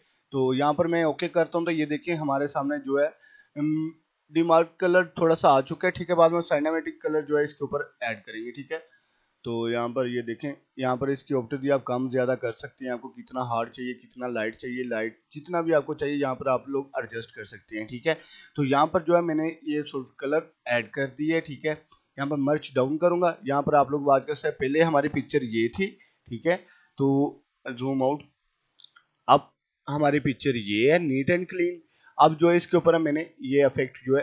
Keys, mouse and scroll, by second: 1.5 right click, 1.8 click, 7.4 right click, 8.2 right click, 8.8 click, 9.2 right click, 9.9-19.0 drag, 20.6 right click, 22.4 click, 26.8-27.1 scroll down 1, 27.5 right click, 28.1 click, 28.6 scroll down 1, 29.0 scroll up 1, 30.1 click, 31.6 scroll up 1, 32.5 click, 33.6 right click, 34.0 click.